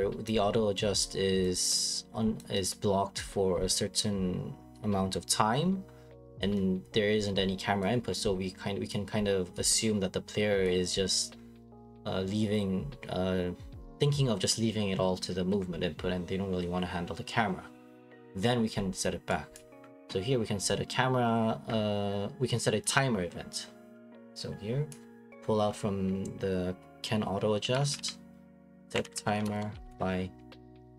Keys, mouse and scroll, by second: 0.2 click, 1.4 click, 2.4 click, 3.2 click, 8.9 click, 10.6 click, 19.5 click, 24.9 click, 28.8-29.7 typing.